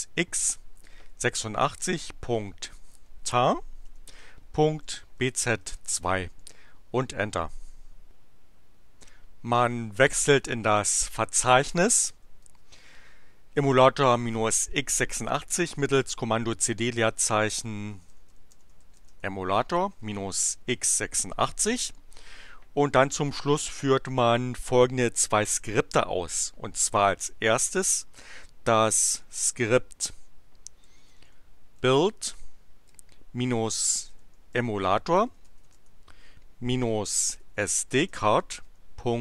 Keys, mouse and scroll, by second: 0.0-6.1 typing, 6.3 Return, 11.7-12.6 typing, 17.6-21.4 typing, 28.2 ., 29.1 shift+7, 30.6-39.2 typing.